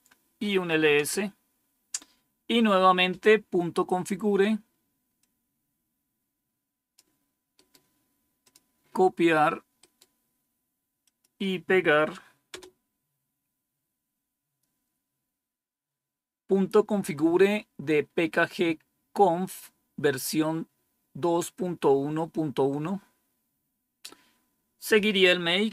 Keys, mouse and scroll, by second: 0.0-0.6 typing, 5.1-6.9 drag, 7.5 right click, 8.4 click, 9.7 right click, 10.9 click, 12.4 Return, 25.3-25.7 typing.